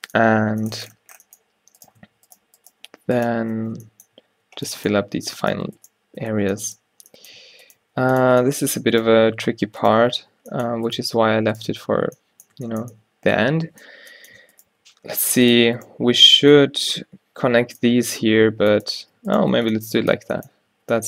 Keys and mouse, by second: 0.6 Tab, 3.7 click, 3.7 f, 4.4 ctrl+r, 6.3 click, 6.3 f, 7.5 a, 7.9 x, 9.3 g, 11.2 q, 12.1 q, 14.9 g, 18.2 g, 19.7 f, 20.9 a.